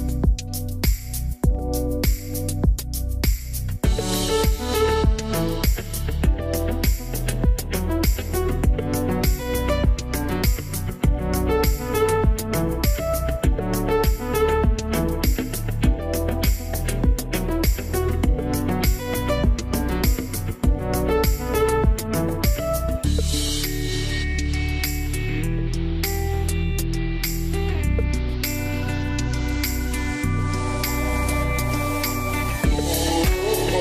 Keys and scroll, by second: 2.4 1, 2.5 Return, 20.2 `, 32.3-33.2 typing.